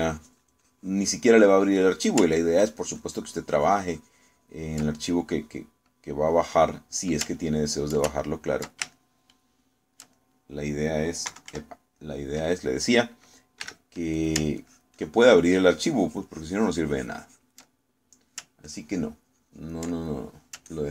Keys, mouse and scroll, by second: 0.5-3.0 ctrl+drag, 4.1-6.0 ctrl+drag, 6.3 middle click, 6.9-8.1 middle drag, 8.4 ctrl+middle click, 9.2 ctrl+middle click, 10.0-11.1 ctrl+shift+middle drag, 11.6 middle click, 12.3 KP_Subtract, 13.1 middle click, 14.7 f, 15.2 ctrl+click, 15.7-18.7 ctrl+drag, 19.0 ctrl+middle click, 19.7-20.9 ctrl+drag.